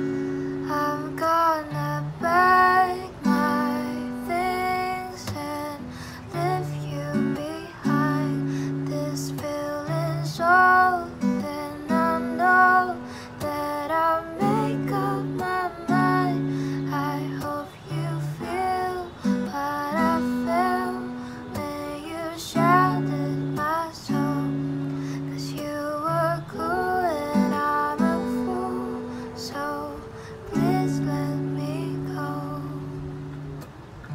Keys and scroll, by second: 3.5 r, 5.1 u, 14.3 F9, 22.1 space, 25.1 space, 32.5 ctrl+alt+shift+y.